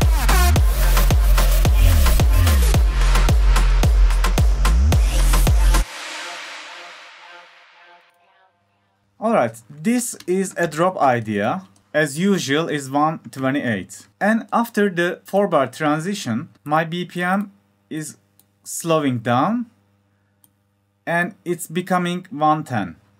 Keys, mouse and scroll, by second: 5.5 click, 5.6 scroll up 2, 11.9 F1, 13.2 drag, 21.7 F1, 21.7 click, 22.2 F1.